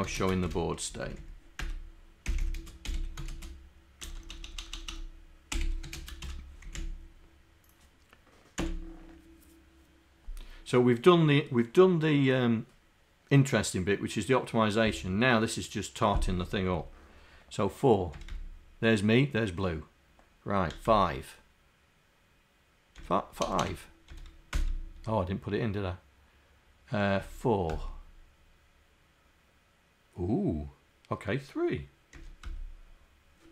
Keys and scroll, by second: 6.1 /.